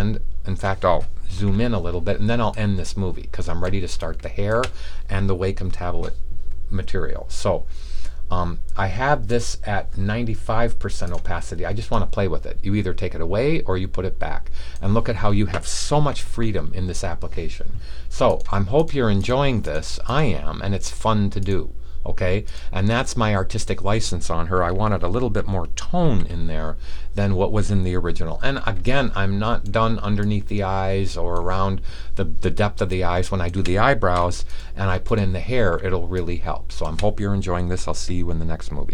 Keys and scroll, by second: 25.9 super+s.